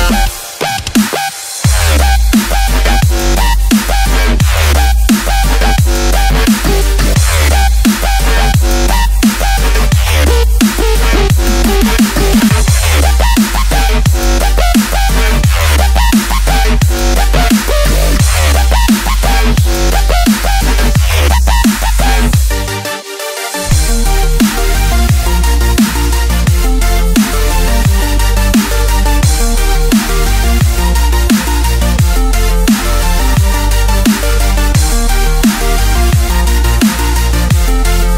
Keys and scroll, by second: 32.9 alt+super+space, 32.9 alt+super+space, 33.5-35.0 super+space, 35.2 space.